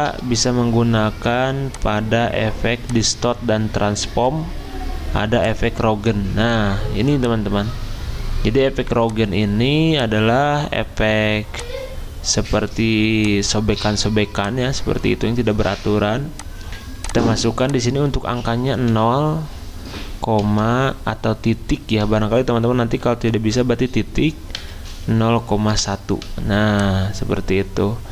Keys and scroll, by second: 18.9 0, 20.8 ., 24.6 1, 25.7 Delete.